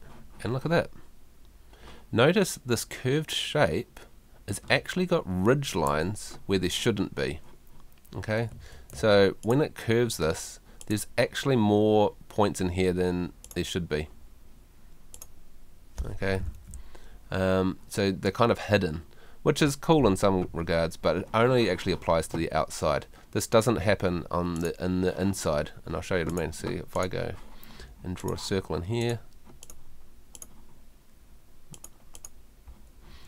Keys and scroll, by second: 5.7 F2, 8.5 Escape, 23.9 Home, 33.1 Home.